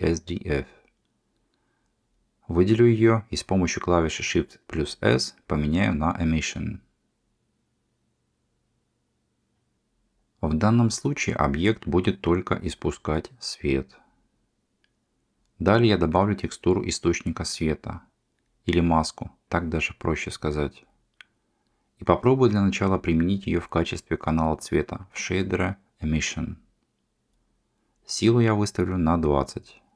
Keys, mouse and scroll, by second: 2.2 shift+s, 6.2 g, 7.5 click, 7.8 g, 13.1 middle click, 13.3 shift+a, 17.8-20.1 drag, 21.1-23.0 drag, 24.6-27.5 drag.